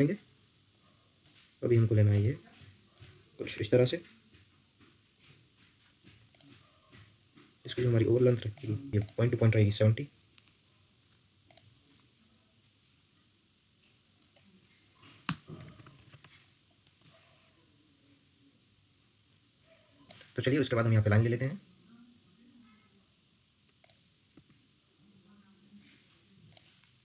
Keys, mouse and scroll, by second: 15.3-16.2 typing, 24.3 Escape.